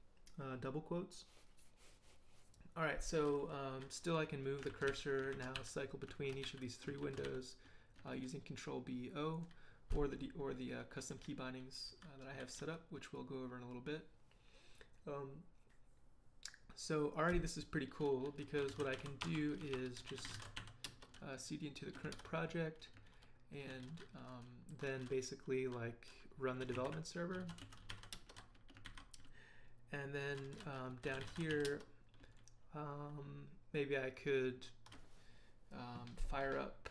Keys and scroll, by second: 4.7 ctrl+b, 4.9 ctrl+o, 5.3 ctrl+b, 5.5 o, 6.4 b, 7.0 o, 8.1 l, 11.2-13.1 typing, 18.3-21.0 typing, 22.1 ctrl+l, 23.0 ctrl+l, 26.4-28.4 typing, 28.8 ctrl+j, 30.7-32.0 typing.